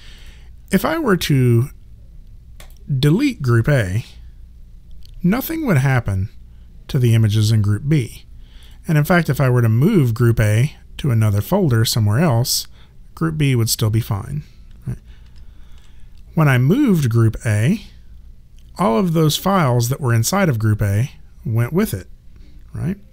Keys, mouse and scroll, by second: 2.6 click, 8.7 click, 15.2 ctrl+z, 16.4 click.